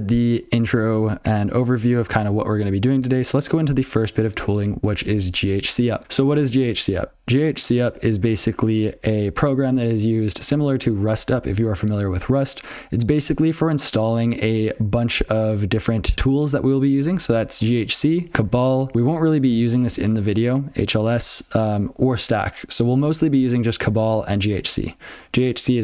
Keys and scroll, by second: 20.1 alt+x.